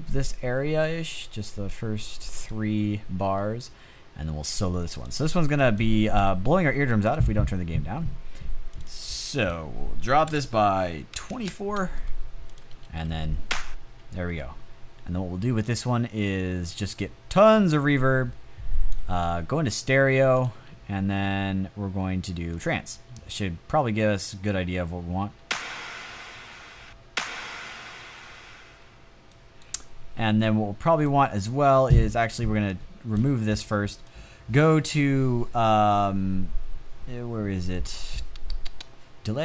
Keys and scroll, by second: 9.7-11.1 typing, 12.6 space, 24.7 space, 26.1 space, 26.3 space, 27.8 space.